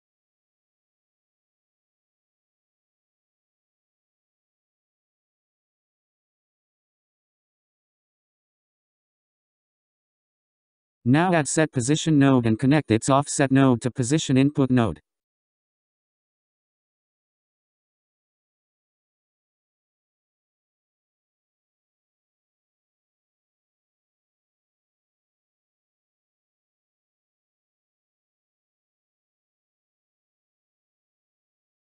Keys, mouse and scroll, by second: 0.1-2.0 drag, 3.0-4.6 scroll up 4, 5.0-6.2 scroll down 15, 7.1-8.5 scroll up 6, 8.7-9.3 scroll down 3, 9.3-10.1 scroll up 8, 10.1-10.4 scroll down 7, 10.8-11.7 scroll up 6, 11.7 click, 12.8-13.5 scroll down 5, 13.5 scroll up 4, 14.1-16.1 drag, 16.1 shift+a, 22.2-23.7 scroll up 3, 23.7 shift+a, 29.1-31.8 drag.